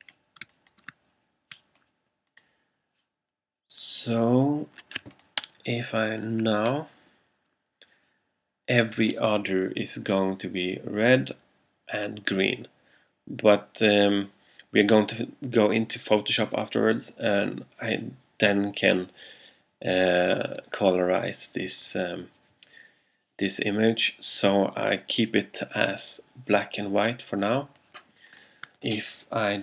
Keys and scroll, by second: 0.5 space.